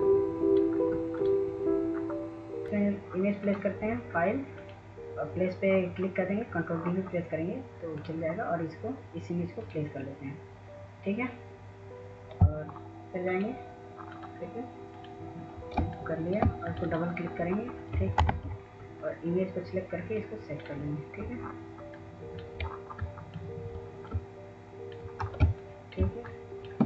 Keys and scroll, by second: 18.5 ctrl+-.